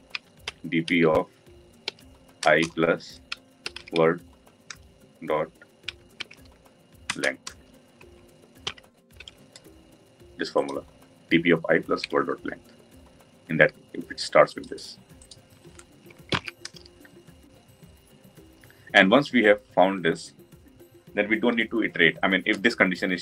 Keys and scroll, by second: 7.1 Return, 16.3 ctrl+alt+l.